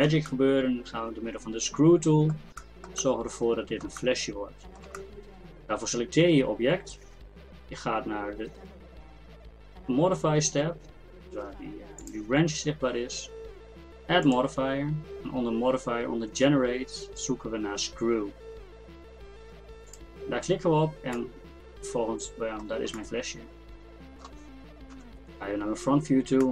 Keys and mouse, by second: 10.4-12.0 middle drag, 12.0-16.0 drag, 21.2-24.9 drag, 24.9 KP_1.